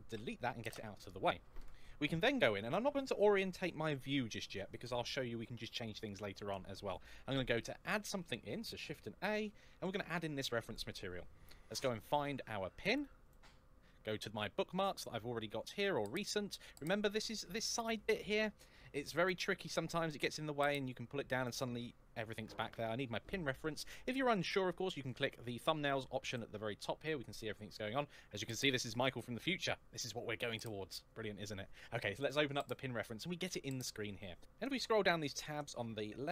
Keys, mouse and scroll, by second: 0.3 x, 0.5 Return, 7.5 shift+a, 10.6 click, 11.9 click, 12.3 click, 15.4 click, 26.1 click, 31.9 click, 34.3-34.9 scroll down 2, 35.0-35.8 scroll down 1.